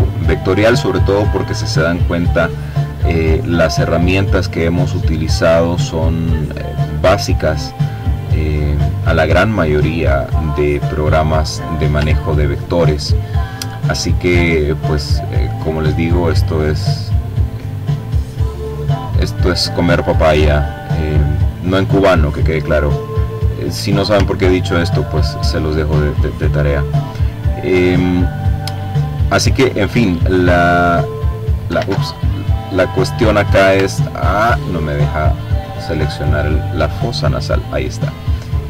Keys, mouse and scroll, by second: 0.8 click, 1.7-3.4 drag, 3.7-5.3 drag, 5.6-6.9 drag, 7.0-8.5 drag, 8.9-9.5 scroll up 2, 9.9-10.9 ctrl+scroll down 2, 10.9-12.7 ctrl+drag, 13.1 click, 13.9-15.1 drag, 15.2-16.3 drag, 17.7-19.1 drag, 19.5-20.7 drag, 21.9-22.5 ctrl+scroll up 2, 24.2 click, 25.3 click, 26.5-28.0 drag, 28.2-29.5 drag, 29.3 ctrl+z, 29.8-30.8 ctrl+drag, 30.9 click, 31.4-32.2 ctrl+scroll down 2, 32.2-33.8 ctrl+drag, 35.6-36.8 drag, 36.6 ctrl+z, 37.0 ctrl+click.